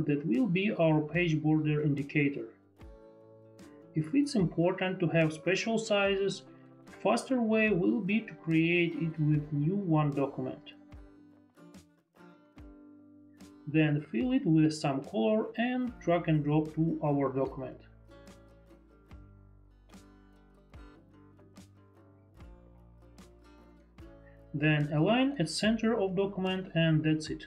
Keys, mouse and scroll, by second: 2.1 ctrl+BackSpace, 2.2 ctrl+z, 3.0 ctrl+d, 10.3 ctrl+n, 13.0 click, 13.6 click, 14.8 click, 17.5 click, 22.3 Delete, 25.0 click, 26.7 click.